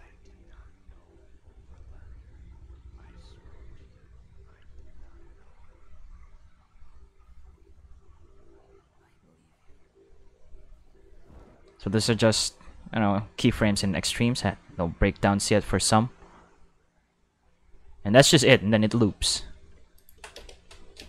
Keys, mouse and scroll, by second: 2.9 q, 18.8 space, 19.9 click, 20.3 space, 20.9 space.